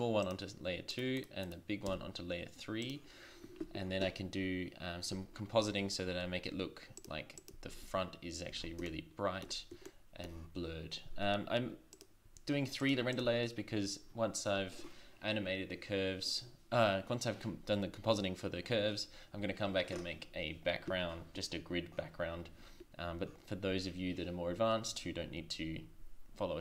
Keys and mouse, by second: 1.2 right click, 1.9 m, 7.0-7.8 drag, 7.8 shift+z, 8.5 shift+z, 12.9-15.6 drag.